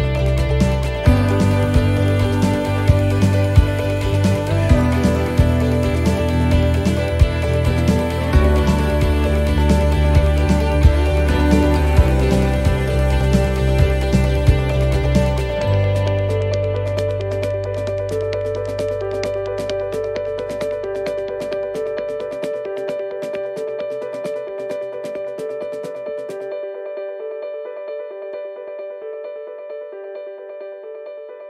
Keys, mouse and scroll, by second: 0.4-1.0 scroll down 2, 1.0 shift+middle click, 1.7 click, 4.2 click, 7.5 middle click, 8.3 scroll up 2, 9.3 click, 10.3 middle click, 11.2 click, 12.2 middle click, 12.8 shift+middle click, 13.1-13.5 scroll up 3, 14.0 click, 15.1 middle click, 15.7 scroll down 2, 16.9 shift+middle click, 17.7 click, 18.5 shift+middle click, 19.0-19.9 scroll up 4, 19.3 middle click, 20.4 shift+middle click, 20.9 middle click, 21.7 middle click, 21.9 shift+middle click, 22.9 s, 24.9 middle click, 27.4 s, 29.3 middle click, 29.8 middle click, 30.6-31.3 scroll down 5, 31.2 middle click.